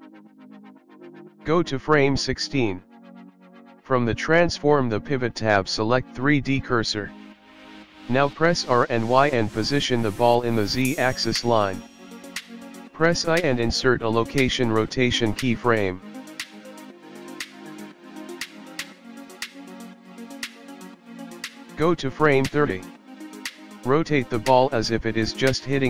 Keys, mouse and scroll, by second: 2.1 click, 6.2 r, 7.3 click, 9.2 r, 15.2 i, 20.6 click, 24.5 r.